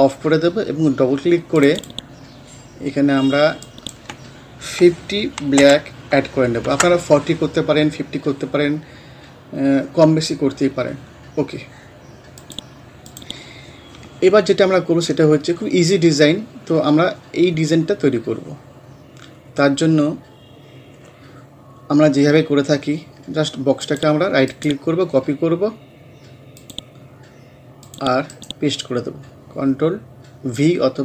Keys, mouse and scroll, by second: 1.6 click, 5.2-6.1 typing, 6.7 shift+Tab, 12.4 click, 14.8 scroll up 1, 19.0 scroll down 1, 20.1-20.6 scroll up 1, 23.8 click, 24.5 right click, 26.6 click, 28.3 right click.